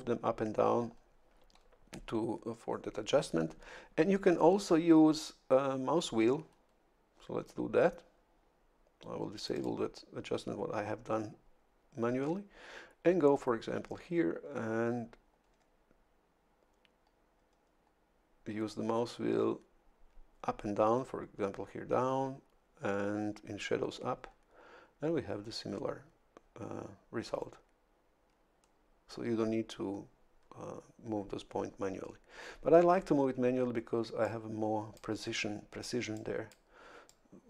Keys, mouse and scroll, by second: 9.4 click, 14.4-14.9 scroll down 1, 15.4-15.7 scroll down 1, 17.3-17.8 scroll down 1, 23.9-24.3 scroll up 1, 24.8 scroll up 1, 26.1 scroll down 2, 26.7 scroll up 2, 34.2 click, 36.1 click, 37.1-37.4 drag.